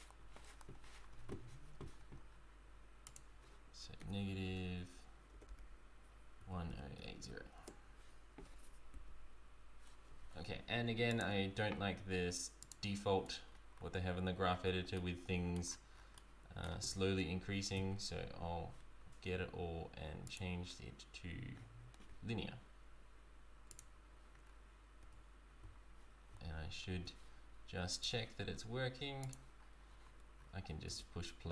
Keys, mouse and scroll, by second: 3.1 click, 9.3 typing, 11.2 click, 11.3 i, 13.6-14.1 scroll down 5, 15.1 middle click, 15.7-16.2 scroll down 6, 16.2 middle click, 17.8 a, 20.3 click, 24.6 scroll down 3, 25.3 Tab, 25.6 scroll up 2, 25.7 z, 27.0 Tab, 27.9 click, 30.4-30.7 scroll up 4, 30.9 space.